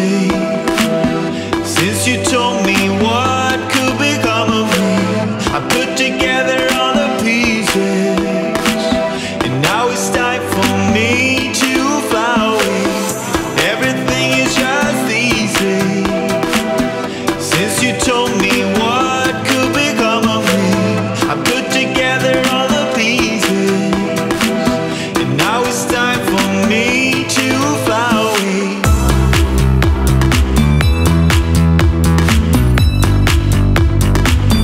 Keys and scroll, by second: 0.6 ctrl+z, 20.4 ctrl+z.